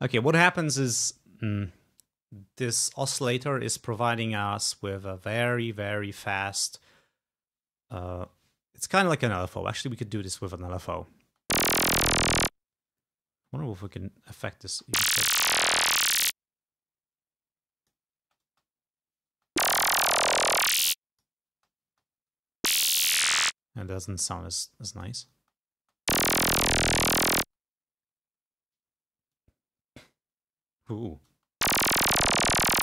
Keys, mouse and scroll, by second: 11.4 space, 12.7 space, 13.6-14.7 drag, 14.9 space, 16.2-18.3 drag, 18.3 space, 19.5 space, 20.7 click, 21.7 space, 23.6 space, 23.9-25.4 drag, 25.4 space, 27.5 space, 29.4-31.3 drag, 31.4 space.